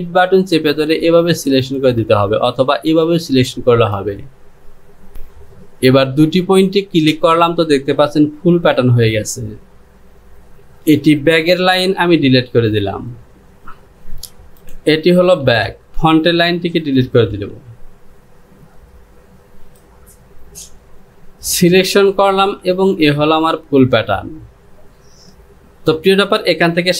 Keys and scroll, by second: 11.4 Delete, 13.9 j.